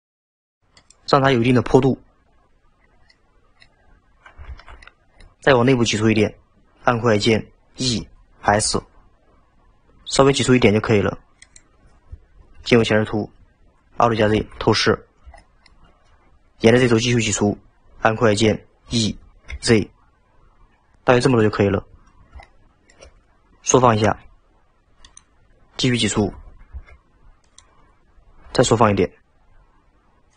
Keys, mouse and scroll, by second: 3.1 middle click, 3.8-4.4 scroll down 2, 4.4 alt+z, 4.8-6.0 middle drag, 6.0 scroll up 1, 7.9 e, 12.5 KP_1, 14.3 alt+z, 15.0-15.4 scroll up 1, 15.4-16.4 shift+middle drag, 19.0 e, 21.8-22.2 scroll up 2, 22.4-24.1 shift+middle drag, 24.1 s, 26.2 e, 28.5 s.